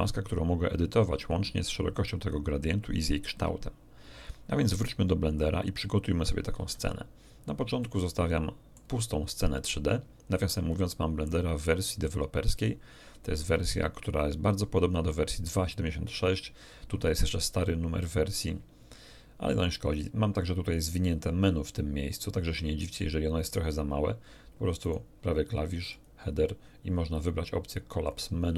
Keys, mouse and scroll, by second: 5.3 click, 6.5 x, 6.7 click, 7.8-8.9 shift+middle drag, 24.8 right click, 25.9 click, 28.0 click.